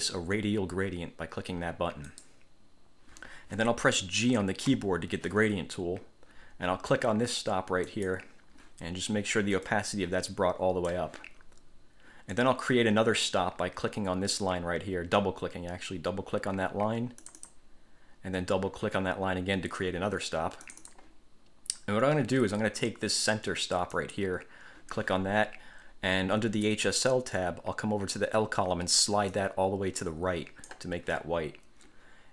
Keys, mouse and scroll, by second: 2.3 click, 4.9 g, 8.1 click, 9.9-11.3 drag, 17.4 click, 20.8 click, 24.1 click, 26.8 click, 29.5 click.